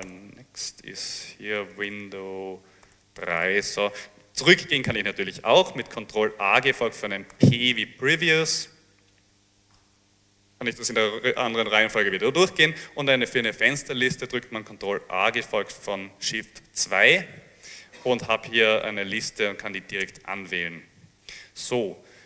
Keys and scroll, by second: 0.0-0.1 typing, 1.4-3.5 typing, 6.6 ctrl+a, 7.4 ctrl+p, 9.4 a, 9.8 p, 15.2 ctrl+a, 16.6 2, 18.5 Down, 18.6 Down, 18.9 Up, 19.2 Down, 20.1 Return.